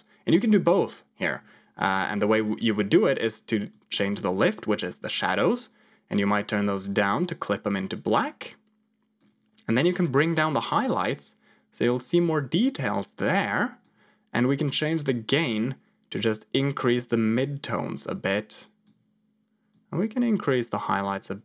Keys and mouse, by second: 3.8-9.1 drag, 10.2-13.8 drag, 14.9-18.8 drag, 19.6-21.0 drag.